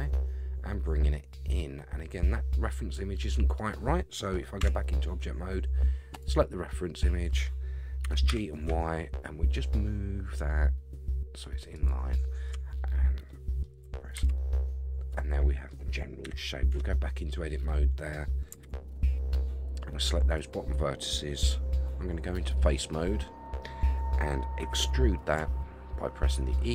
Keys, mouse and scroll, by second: 4.6 Tab, 6.1 click, 8.0 g, 13.3 middle click, 14.1 alt+z, 14.6-15.7 middle drag, 16.2 KP_1, 16.7 Tab, 17.2 scroll up 3, 18.6 alt+z, 19.7 click, 22.6 click, 24.6 e.